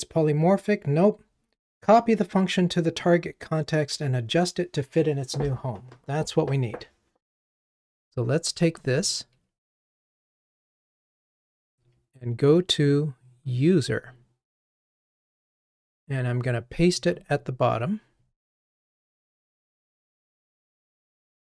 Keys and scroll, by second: 9.6 alt+Up, 13.6 super+b, 20.9 super+v.